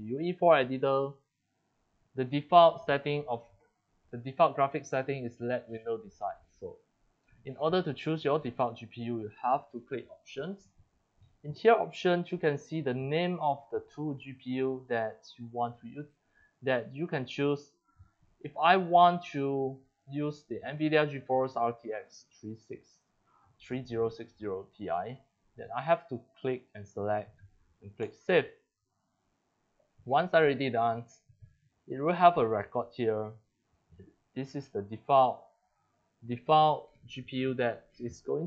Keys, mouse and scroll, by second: 8.1 click, 10.3-11.7 drag, 15.3 click, 19.4 click, 19.6 click, 25.9 click, 26.5 click, 26.6 click, 28.0 click, 29.0 click, 32.1 click.